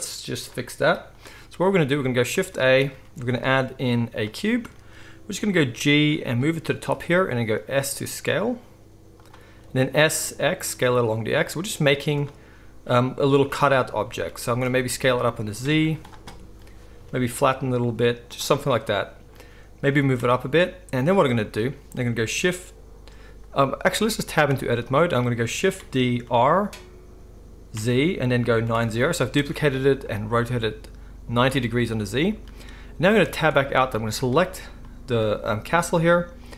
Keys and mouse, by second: 0.0-23.0 drag, 3.0 shift+a, 5.4 g, 6.6 z, 7.4 s, 9.5 s, 11.9 z, 13.3 z, 14.3 s, 15.7 z, 17.0 s, 19.9 g, 23.0-24.9 shift+middle drag, 24.4 Tab, 25.7 shift+d, 33.2 Tab, 36.4-36.5 drag.